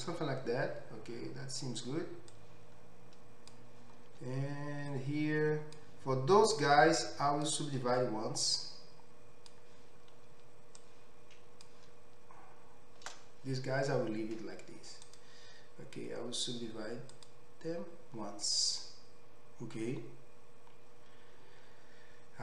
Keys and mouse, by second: 21.8 click, 21.8 middle click, 21.8 right click.